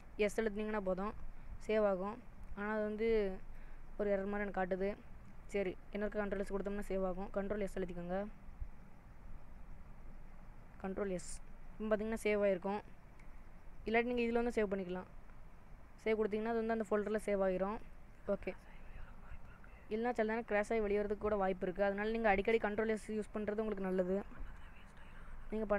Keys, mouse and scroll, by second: 0.2 ctrl+s, 10.9 ctrl+s, 14.1 click.